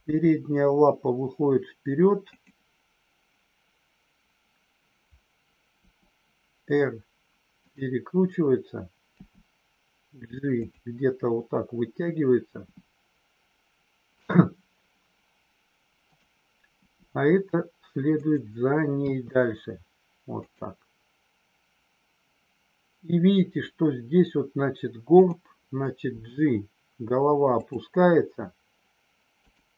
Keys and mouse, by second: 5.8 r, 9.0 g, 12.5 g, 14.1 click, 16.9 g, 18.9 r, 20.4 click, 25.1 click, 26.1 g, 29.3 click.